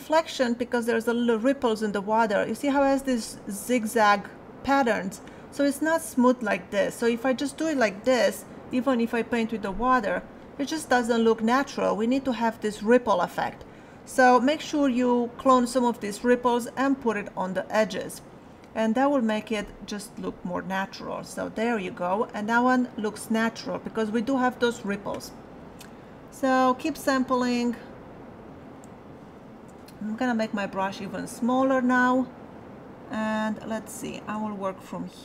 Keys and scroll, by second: 30.4 alt+[, 32.0 alt+[.